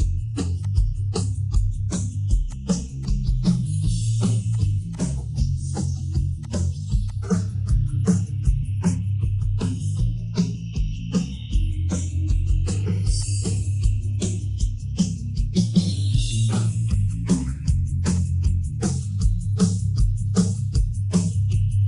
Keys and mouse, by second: 0.6 click, 2.4 click, 3.0-3.7 drag, 3.9 shift+middle click, 4.9 click, 5.5-5.8 shift+middle drag, 6.4 click, 7.1-8.3 drag, 9.2-12.7 middle drag, 13.1-13.9 drag, 14.2 middle click, 14.9 ctrl+z, 15.2-15.8 middle drag, 16.8 Tab, 17.2 middle click, 18.8-20.0 drag, 20.3 middle click, 21.5 KP_1.